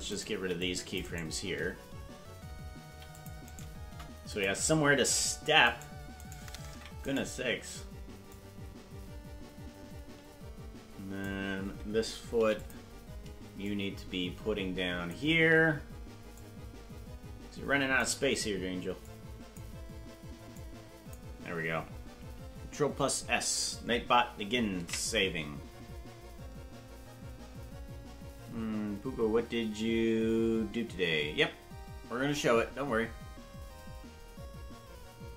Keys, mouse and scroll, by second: 0.1 right click, 0.3 c, 1.1 right click, 2.8 c, 3.8 Delete, 5.7 right click, 6.3 right click, 6.7 ctrl+Tab, 7.1 right click, 8.3-11.3 drag, 12.3 i, 13.6-15.1 drag, 16.3-18.0 shift+drag, 19.0 click, 20.5 click, 27.3 ctrl+s.